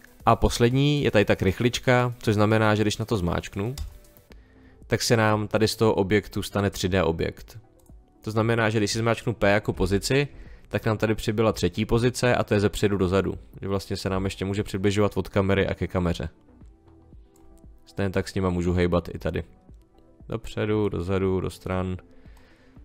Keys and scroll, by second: 9.7 p.